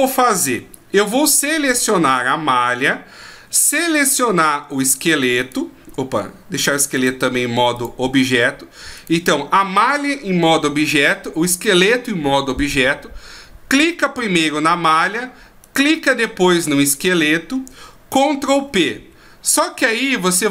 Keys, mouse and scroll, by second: 5.4 shift+right click, 7.2 click, 8.9 right click, 15.6 shift+right click, 18.6 ctrl+p.